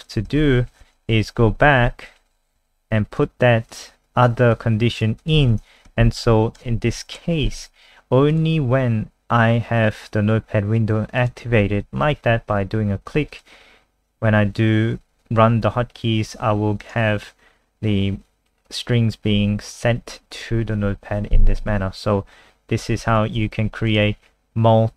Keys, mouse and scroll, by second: 0.0 click, 0.4 ctrl+z, 1.5 ctrl+z, 1.7 ctrl+z, 1.8 ctrl+z, 2.0 ctrl+z, 2.2 ctrl+z, 2.6 ctrl+z, 3.2 click, 5.4 ctrl+s, 5.9 F5, 7.0 super+n, 8.3 click, 23.1 alt+F4, 23.5 n, 23.9 click.